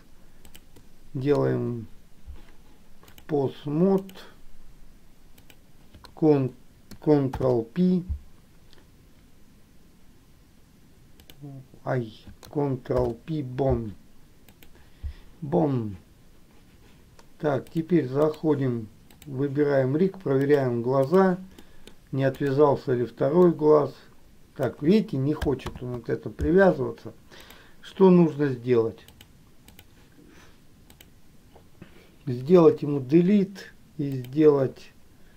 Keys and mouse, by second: 3.5 click, 5.6 click, 7.5 ctrl+p, 13.1 ctrl+p, 18.0 click, 20.4 click, 21.9 middle click, 23.7-24.9 drag, 25.8 ctrl+z, 29.4 click, 32.7 Delete.